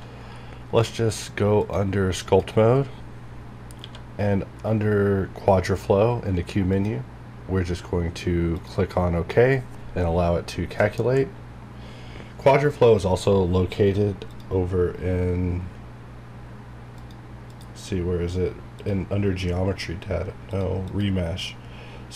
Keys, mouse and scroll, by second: 0.3-1.6 scroll down 1, 1.6 click, 3.2 scroll up 1, 3.8 q, 6.7 click, 6.7 click, 14.3 click, 17.0 click, 19.8-20.3 scroll down 1, 20.5 click, 21.6 scroll down 1.